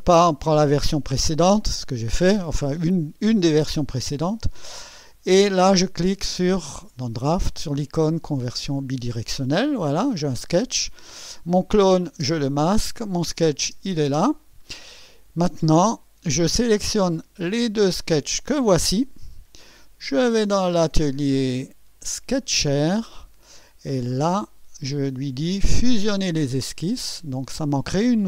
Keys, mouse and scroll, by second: 8.3 click, 12.2 space, 13.2 click, 13.6 space, 18.1 ctrl+click, 20.5 click, 22.3 click, 24.4 click, 26.4 click.